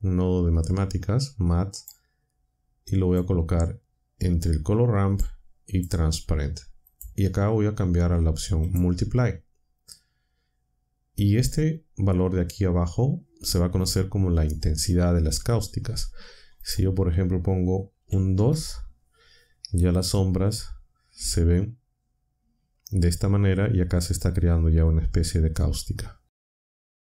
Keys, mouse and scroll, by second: 1.7 click, 3.0 click, 5.1 click, 6.8 click, 8.6 click, 16.6 click, 18.0 2, 18.3 Return.